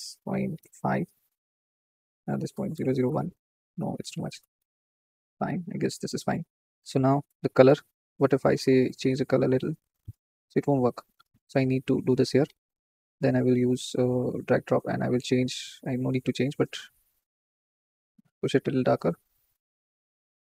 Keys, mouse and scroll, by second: 0.5-3.0 drag, 3.0 KP_0, 5.8 scroll up 2, 8.8-10.0 drag, 10.7 ctrl+z, 12.0-13.6 drag, 14.1 click, 16.7-18.2 drag.